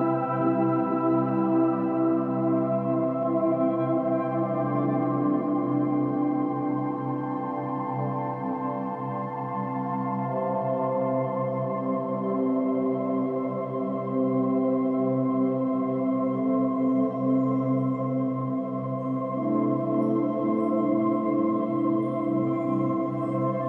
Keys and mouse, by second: 2.0 click, 3.6 click, 3.8 click, 4.9 click, 5.2 drag, 5.9 click, 6.7 Delete, 8.1 click, 8.7 click, 9.9 click, 10.7 click, 12.1 click, 13.4 click, 15.0 click, 15.9 click, 16.1 click, 17.0 click, 17.1 click, 20.9 click, 21.2 click.